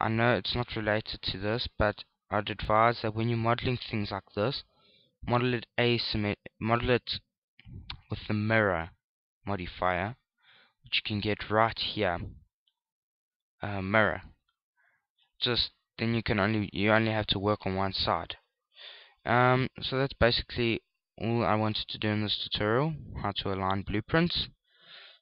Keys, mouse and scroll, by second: 3.1 shift+click, 3.3 s, 4.6 click, 5.2 shift+middle click, 5.5-6.5 scroll up 8, 7.0 s, 8.2 click, 9.1 shift+click, 10.0 ctrl+z, 10.6 click, 13.0 click, 16.6 click, 18.6 Tab, 19.1 right click, 19.6 Tab, 21.2 x, 22.8-23.8 scroll down 6, 23.3-23.8 scroll up 2, 23.8 scroll down 2, 24.0-24.7 scroll down 5, 24.6 scroll up 1, 24.7-25.2 scroll down 1.